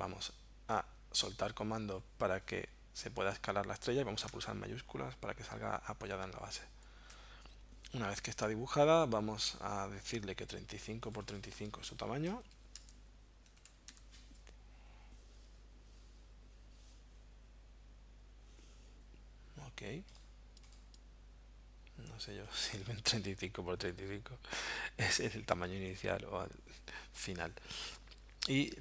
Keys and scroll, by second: 12.1-14.1 typing.